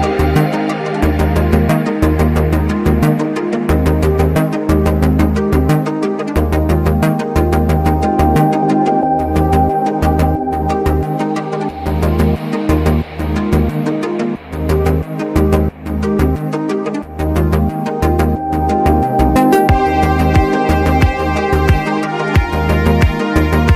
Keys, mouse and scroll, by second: 0.2 click, 1.4 click, 3.4-8.2 drag, 4.6 typing, 9.0 click, 11.1-15.0 drag, 17.8-21.7 drag, 21.7 click.